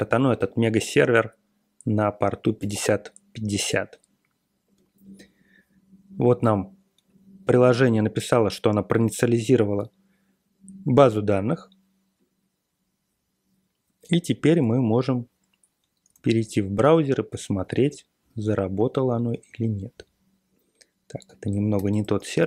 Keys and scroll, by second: 2.6 Return, 16.1 super+Tab, 21.7-22.4 typing.